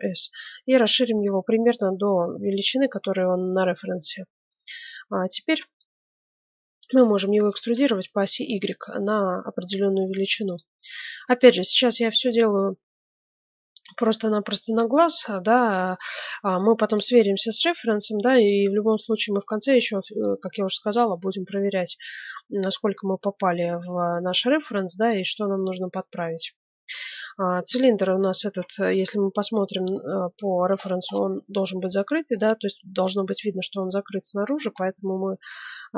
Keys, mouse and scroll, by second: 4.5-4.9 scroll up 1, 4.9-6.8 middle drag, 7.3 e, 10.9-12.7 middle drag, 14.9-16.7 middle drag, 17.5-19.1 middle drag, 21.8-23.4 middle drag, 24.0 middle click, 25.0-26.9 right drag, 26.7 middle click, 28.9 KP_1, 29.1-30.4 middle drag, 30.8 middle click, 31.1 middle click, 32.4-35.1 middle drag, 35.1 middle click.